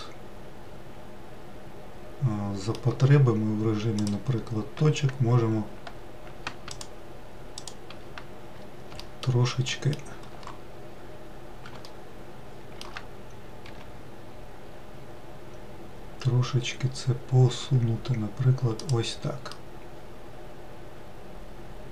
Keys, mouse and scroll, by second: 4.7 click, 7.4 ctrl+click, 8.2 ctrl+click, 9.7 alt+middle click, 10.4 alt+middle click, 11.5-12.4 scroll up 1, 12.5-14.4 shift+middle drag, 14.4 g, 20.2-21.9 middle drag.